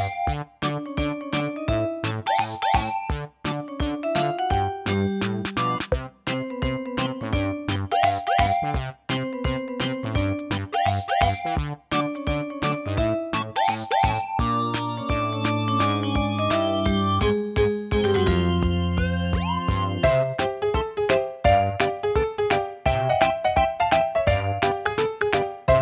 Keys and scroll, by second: 11.1 Up, 11.5 Up, 11.7 Up, 14.1 Down, 14.3 Down, 21.3 Right, 21.6 Right, 22.8 typing.